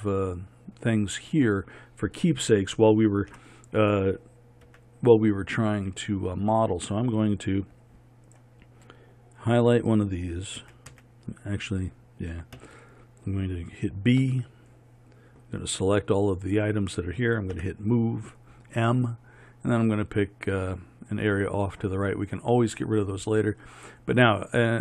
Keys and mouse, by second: 0.0-3.4 drag, 3.4 KP_1, 4.7 z, 10.6 a, 14.3 b, 17.6 m.